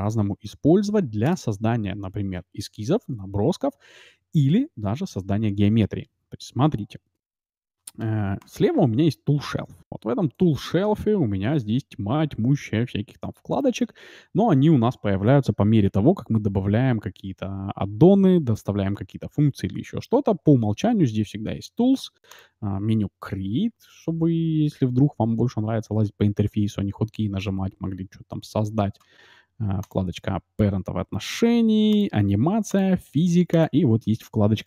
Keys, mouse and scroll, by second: 0.4 a, 0.7 a, 0.9 Delete, 6.8-9.0 middle drag, 8.4 t, 10.3-13.2 drag, 13.4-15.2 drag, 22.3-24.2 drag, 23.9 shift+a, 26.4 shift+a, 29.9-31.7 drag, 31.8-34.6 drag.